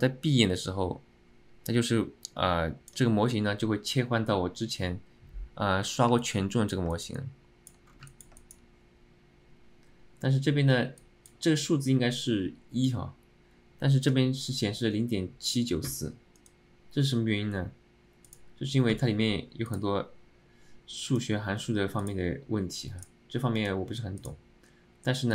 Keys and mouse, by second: 0.0-3.1 drag, 6.3 alt+middle click, 7.0 alt+shift+middle drag, 7.3 alt+middle click, 8.2 middle click, 8.5 shift+middle click, 13.0-14.1 drag.